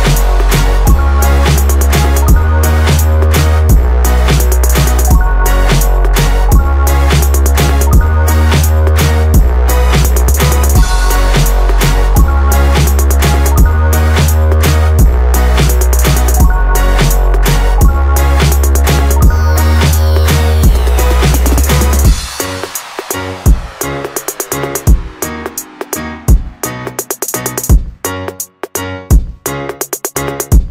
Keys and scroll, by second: 3.9 Return, 9.3 Return, 21.0 Return.